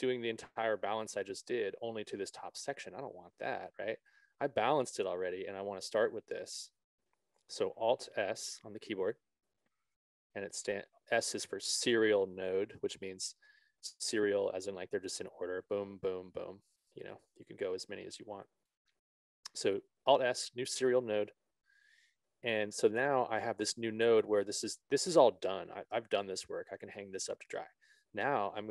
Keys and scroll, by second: 3.9 ctrl+z, 9.5 alt+s, 18.2 alt+s, 19.3 ctrl+z.